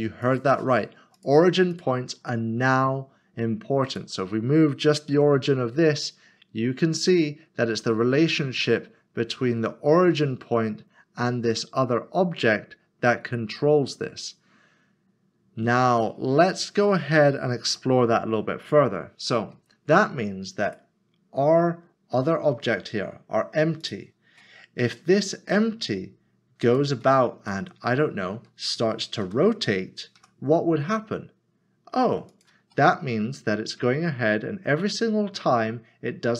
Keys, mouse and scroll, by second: 0.2 click, 3.9 click, 5.1 g, 16.5 click, 17.7 ctrl+z, 18.6 click, 23.8 click, 26.6 click, 27.7 middle click, 30.2 typing, 32.7 middle click, 34.3 shift+middle click.